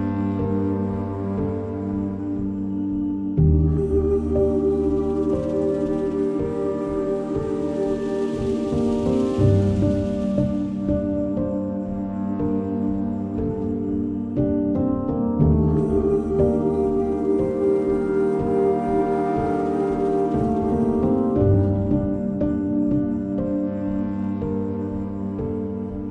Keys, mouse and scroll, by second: 0.9 scroll down 1, 1.3 scroll, 1.6-2.2 scroll down 1, 3.0 scroll down 1, 5.0 scroll up 1, 5.7 middle click, 6.9 click, 9.5 click, 9.5 click, 12.0 click, 13.1 middle click, 13.5 click, 15.2 scroll down 1, 16.9 click.